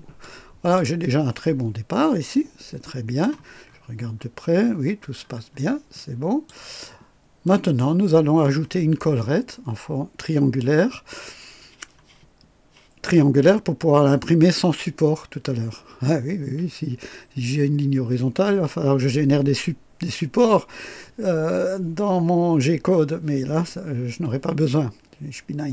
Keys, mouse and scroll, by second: 0.2 click, 1.0-3.4 drag, 3.6-4.4 scroll up 2, 4.8-5.7 scroll down 3, 5.9-6.6 drag, 7.4 click, 8.2-8.5 scroll up 1.